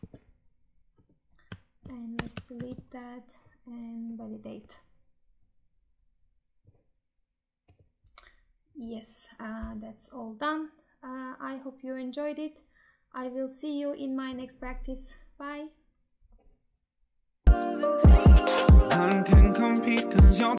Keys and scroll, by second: 2.5 ctrl+v.